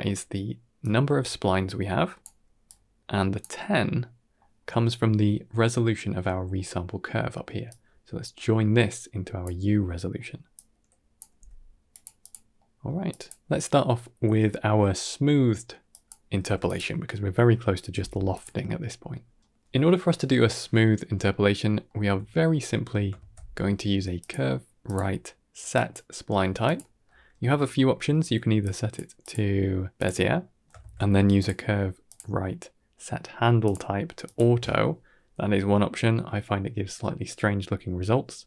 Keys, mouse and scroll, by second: 0.7-2.1 drag, 2.5 click, 3.7 middle click, 4.4-5.6 scroll down 1, 6.2 scroll down 1, 6.4 middle click, 7.6-9.3 drag, 9.7-10.1 middle drag, 10.4-11.1 drag, 11.2 g, 12.1 click, 12.4 middle click, 13.0 drag, 13.3 g, 14.8 middle click, 15.3 middle click, 15.8 drag, 16.3 g, 17.3 middle drag, 17.8 g, 18.5 middle click, 19.3 scroll up 2, 19.7-20.8 middle drag, 21.2 middle click, 21.7 middle drag, 22.1 ctrl+middle drag, 23.1 shift+a, 26.9 middle click, 27.4 ctrl+middle click, 27.9 middle click, 28.5 click, 29.1-29.9 drag, 30.2-30.6 middle drag, 30.7 shift+a, 35.6-36.3 middle drag, 37.4 middle click.